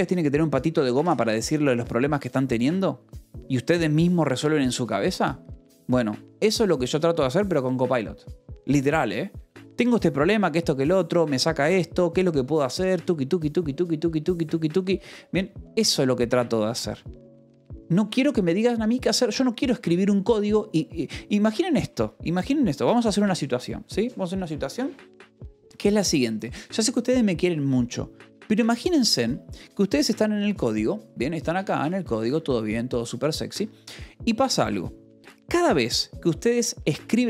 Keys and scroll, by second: 2.5 Escape, 31.5 Escape, 32.8 alt+Tab, 34.1 alt+Tab, 35.3 j, 37.1 o.